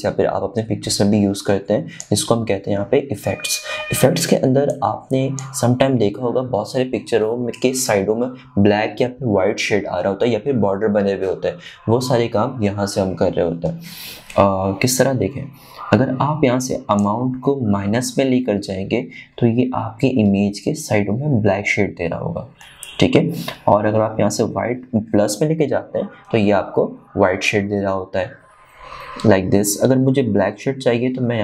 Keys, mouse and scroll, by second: 6.2-9.4 drag, 18.5-28.4 drag.